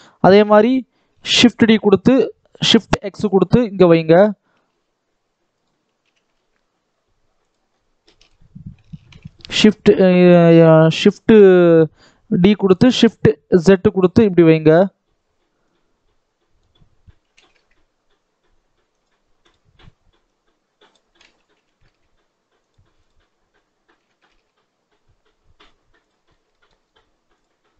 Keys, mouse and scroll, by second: 0.3-1.2 scroll down 2, 1.2 shift+d, 4.3 r, 5.9 g, 7.5-7.9 scroll down 1, 7.9 shift+middle click, 8.3-8.8 scroll up 1, 8.8 shift+d, 15.5 click, 17.1 g, 19.3 click, 20.1 click, 21.4 g, 22.9 click, 23.8 g, 26.1 scroll up 2, 26.4 shift+middle click, 26.8-27.2 scroll up 2, 27.2 click, 27.5-27.7 scroll down 2.